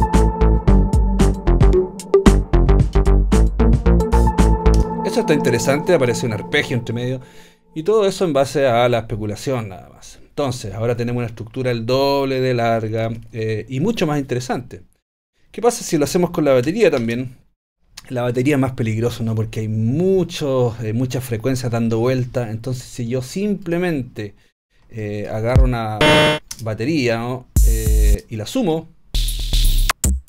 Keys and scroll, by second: 4.8 space, 17.0 shift+super+t, 26.6 space, 28.1 space.